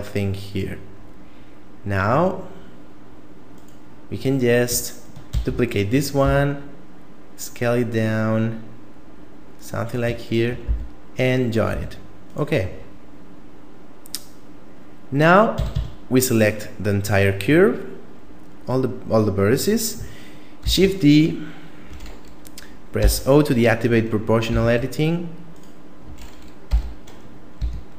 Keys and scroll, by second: 5.3 shift+d, 6.3 s, 10.7 f, 11.7 a, 15.5 a, 15.7 a, 20.7 shift+d, 23.0 o, 24.5 s, 26.7 o, 27.6 s.